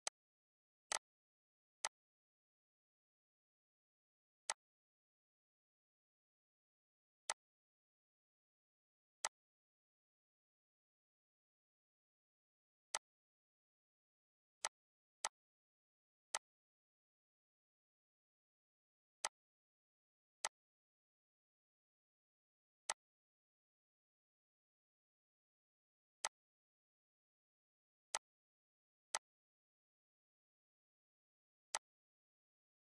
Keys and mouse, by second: 0.4 click, 2.3 click, 4.5 shift+click, 5.9 click, 9.1 click, 10.1 click, 11.4 click, 14.0 click, 15.0 click, 17.1 click, 19.3 ctrl+d, 20.1 click, 21.4 click, 24.2 click.